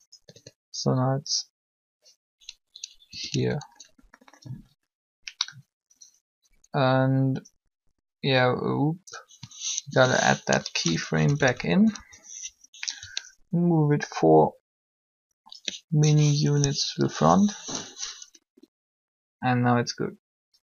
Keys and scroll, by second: 3.0 a, 3.1 a, 9.6 i, 11.2 Up.